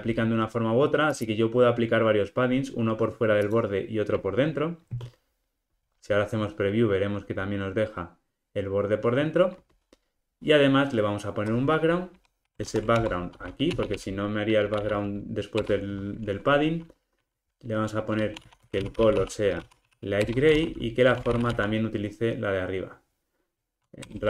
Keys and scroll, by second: 15.6 Return, 20.3 Return.